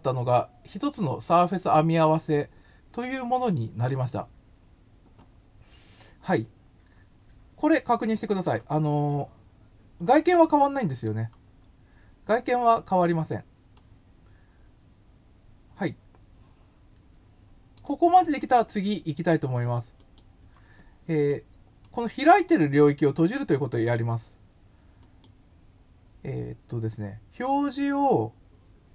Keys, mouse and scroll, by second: 7.0-8.5 middle drag, 10.1 middle click, 13.7-17.7 middle drag, 20.0 click, 21.8 middle click, 25.0 click.